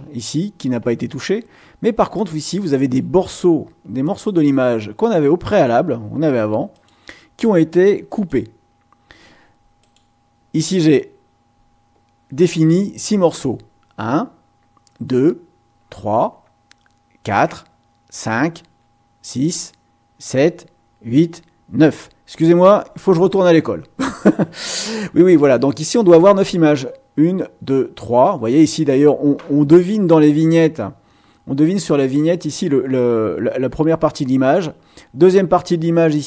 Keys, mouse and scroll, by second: 2.0 click, 2.7 click, 4.0 click, 5.5 click, 6.7 click, 8.1 click, 9.8 click.